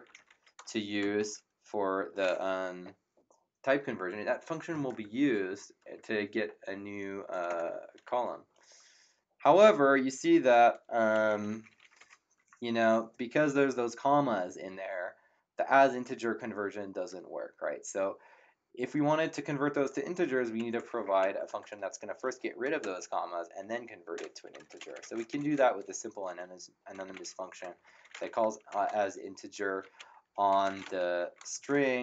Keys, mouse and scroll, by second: 0.0-1.0 typing, 7.5 Return, 10.9-12.4 typing, 20.5 Up, 22.8 BackSpace, 24.1-32.0 typing.